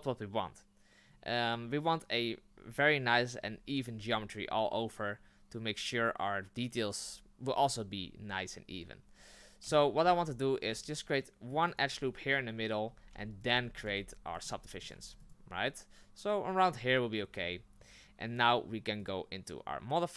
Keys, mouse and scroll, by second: 9.6 ctrl+z, 10.0 ctrl+z, 10.6 ctrl+r, 12.9-15.0 typing, 17.3 Tab.